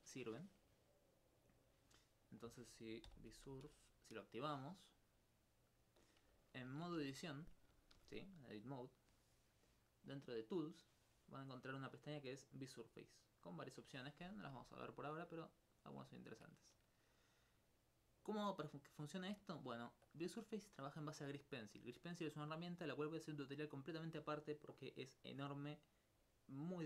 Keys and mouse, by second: 3.1 b, 3.3 s, 3.5 u, 5.7 click, 6.5 alt+click, 6.7 alt+s, 10.1 click, 11.4 middle click.